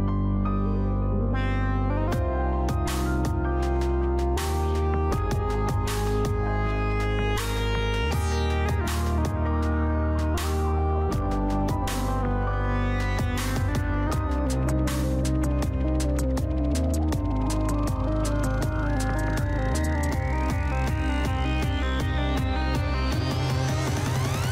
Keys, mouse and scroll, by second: 0.7-1.9 drag, 2.0 scroll down 1, 3.5 click, 4.6-5.6 typing, 7.0-9.9 middle drag, 11.3 click, 13.4-13.7 typing, 14.1 Return, 15.4 click, 16.2 click, 17.9 typing, 18.6 Return, 19.7-21.9 middle drag, 23.2-24.5 drag.